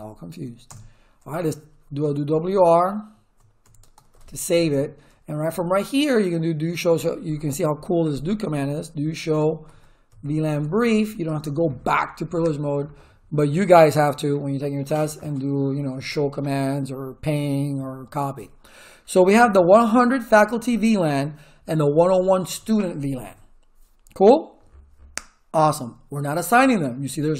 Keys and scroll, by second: 0.7 Return, 1.5-5.6 typing, 8.8-11.7 typing.